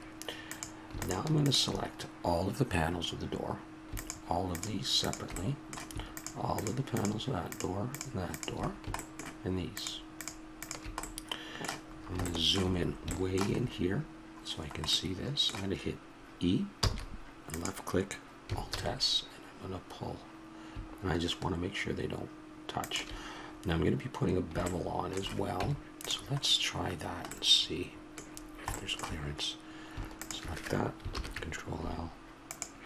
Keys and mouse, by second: 0.5-2.4 drag, 11.9-14.2 middle drag, 16.7 e, 18.7 alt+s, 23.4-25.6 middle drag, 25.6 Tab, 26.4 middle click, 30.2 click, 31.1 ctrl+l.